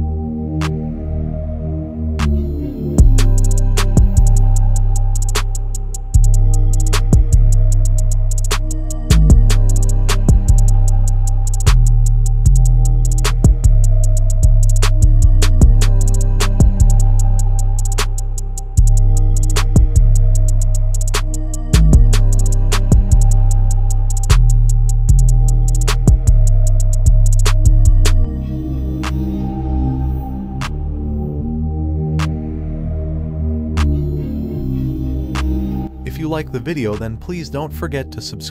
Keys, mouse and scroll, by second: 1.2-1.7 scroll up 1, 2.4-3.2 click, 2.8 space, 3.8 click, 5.2-5.7 scroll down 1, 5.7 click, 7.0-7.8 shift+drag, 13.0 click, 17.4 click, 21.4 click, 24.0-26.5 drag, 31.2 Return, 33.1-34.6 drag, 35.6-36.0 scroll down 1, 36.0 space, 36.2 click, 36.6-37.2 space, 37.4-38.2 scroll up 1, 38.2 space, 38.4-38.5 click.